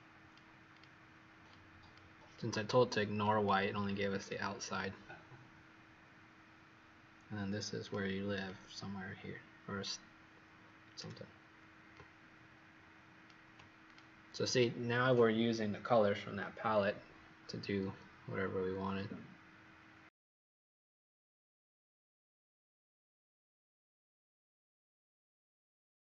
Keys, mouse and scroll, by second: 0.7 click, 11.9 shift+click, 13.8 click, 21.5 Escape.